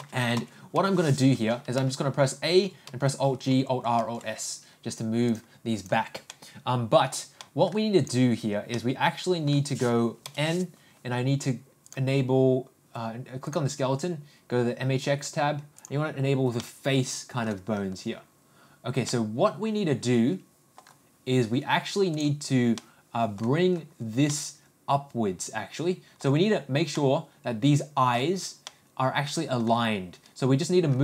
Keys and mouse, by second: 0.3 n, 0.7 n, 2.1 a, 3.2 alt+g, 3.5 alt+r, 4.3 alt+s, 5.3 click, 6.3-7.1 middle drag, 7.4 middle click, 8.7 middle click, 10.2 n, 16.0 click, 16.6 middle click, 19.1-20.8 middle drag, 22.8 middle click, 24.3-26.2 middle drag, 26.9-28.2 middle drag, 28.6 middle click.